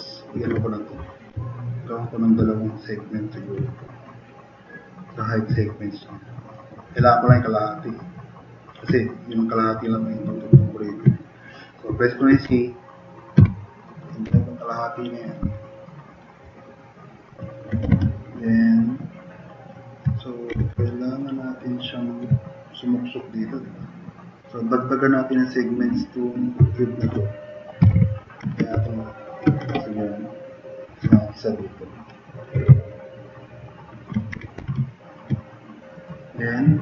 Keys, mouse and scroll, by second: 8.1-8.7 drag, 12.5 c, 13.4 2, 14.2 f, 15.6 drag, 16.4-17.2 drag, 17.9 3, 18.5-19.8 middle drag, 20.5 e, 20.8-21.2 drag, 21.3 drag, 21.9 click, 27.6-28.4 typing, 29.1 click, 29.7 drag, 30.7 drag, 31.8 l, 32.8-34.1 drag, 33.6-35.1 typing.